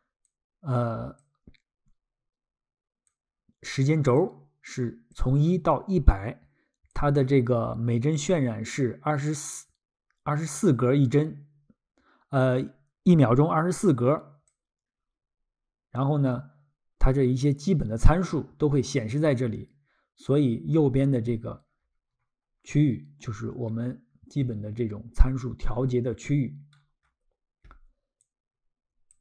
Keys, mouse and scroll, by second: 0.3 click, 3.1 click, 4.7 click, 6.9 click, 13.9 click, 20.3-20.7 scroll, 28.2 click.